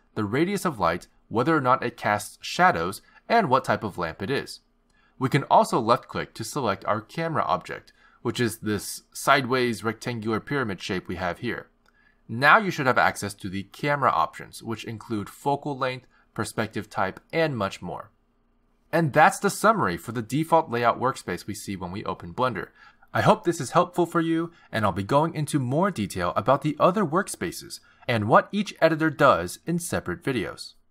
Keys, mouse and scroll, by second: 0.8 click, 2.4 click, 2.7 click, 3.4 click, 3.8 click, 4.2 click, 4.8 click, 8.3 click.